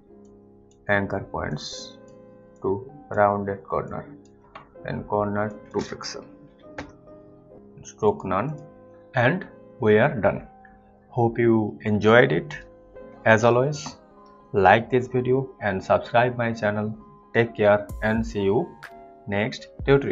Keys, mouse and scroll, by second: 0.5 shift+click, 1.7 shift+click, 2.8 shift+click, 4.1 shift+click, 5.7 click, 6.4 click, 6.7 Return, 7.3 click.